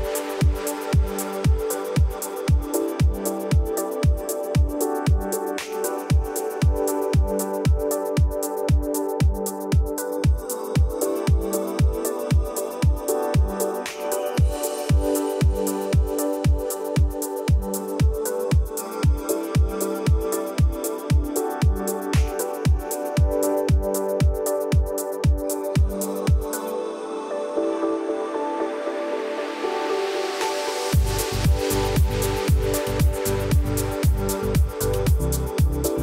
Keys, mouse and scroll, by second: 1.2 ctrl+v, 2.3 click, 4.5 click, 6.5 ctrl+v, 7.3 click, 8.6 alt+scroll up 1, 10.5-12.6 drag, 14.1-14.4 drag, 16.2 Right, 16.6 BackSpace, 16.7 5, 17.7 click, 20.7 alt+scroll up 1, 21.6 alt+scroll down 1, 22.1 alt+scroll up 1, 22.6-23.6 drag, 25.0 F7, 26.1-31.2 ctrl+drag, 35.7 alt+scroll down 1.